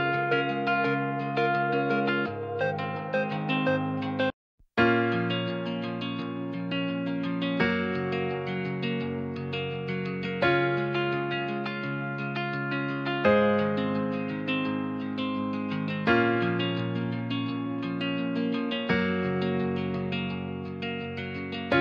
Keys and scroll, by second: 12.8-13.5 typing.